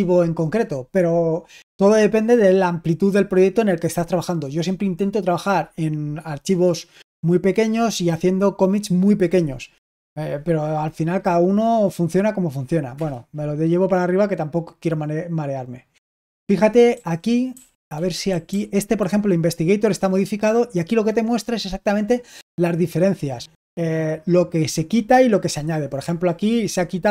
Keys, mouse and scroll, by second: 12.8 Return, 16.8-18.8 typing.